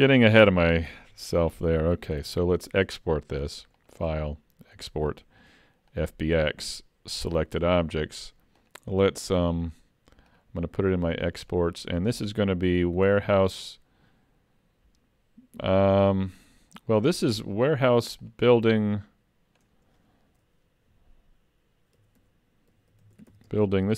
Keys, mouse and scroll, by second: 0.5 middle click, 1.3 shift+middle click, 2.2 ctrl+s, 3.8 click.